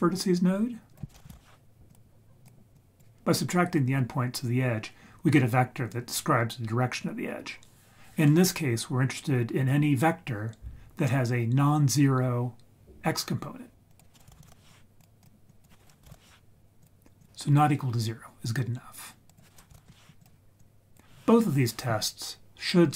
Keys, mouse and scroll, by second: 0.9-2.4 drag, 2.8 click, 3.1-13.9 scroll down 2, 13.9-15.2 drag, 15.5-17.2 drag, 19.3 click, 20.6 click.